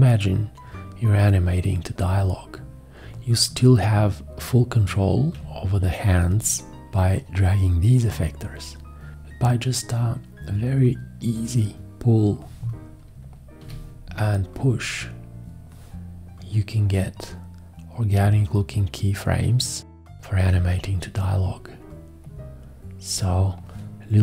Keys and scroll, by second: 13.6 x.